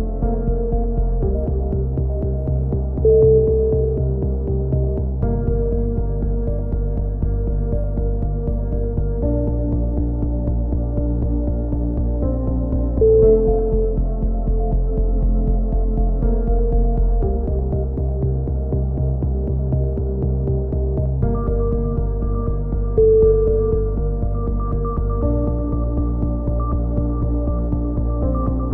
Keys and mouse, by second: 0.3 e, 0.6-1.6 drag, 2.0 click, 4.2 s, 7.2 e, 7.5 click, 8.0 click, 8.6 r, 9.1 r, 9.6 ctrl+z, 9.9 r, 11.3 click, 11.3 a, 11.4 z, 12.7-13.7 right drag, 13.0 z, 13.5 KP_1, 13.9 r, 16.0 a, 16.4 z, 17.1 ctrl+z, 17.6 click, 17.8 c, 18.1 right click, 18.4 KP_3, 19.4 click, 20.8 b, 21.5-24.1 drag, 24.7 right click, 25.3 click, 26.3 a, 26.4 z, 26.9 click, 28.6 right click.